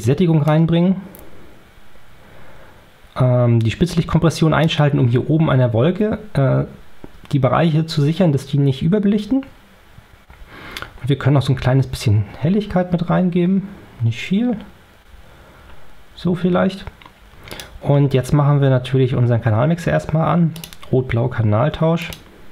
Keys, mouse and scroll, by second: 0.0-0.5 drag, 3.9-4.8 drag, 11.1-11.4 scroll up 2, 12.3 scroll down 2, 14.5 scroll down 2, 15.3 scroll up 2, 17.4 click, 20.4 click, 21.9 click.